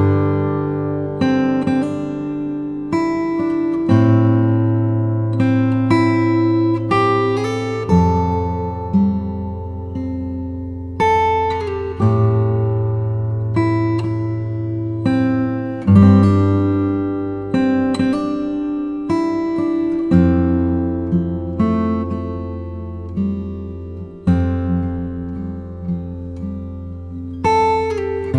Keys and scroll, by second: 4.1 super+t, 4.7 alt+super+t, 15.4 super+t, 15.9 alt+super+t, 20.6 shift+Left, 21.1 shift+Up, 21.6 shift+Down, 22.1 shift+Right, 22.9 Right, 23.9 space, 26.1 b.